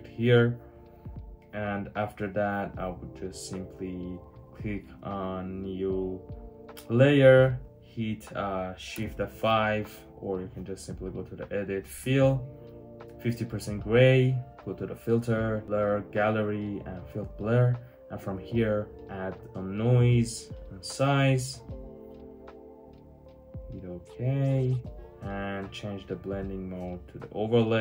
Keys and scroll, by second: 8.8 shift+F5.